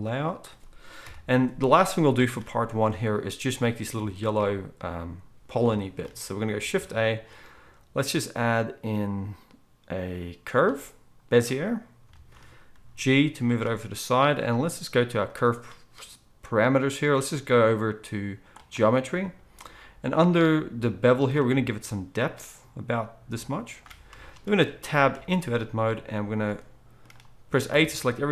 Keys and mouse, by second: 1.0 KP_1, 2.0-15.8 shift+middle drag, 6.6 shift+a, 12.7 g, 15.8-28.3 right drag, 21.5-28.3 shift+drag, 21.5-28.3 shift+middle drag, 25.2 Tab, 27.7 a.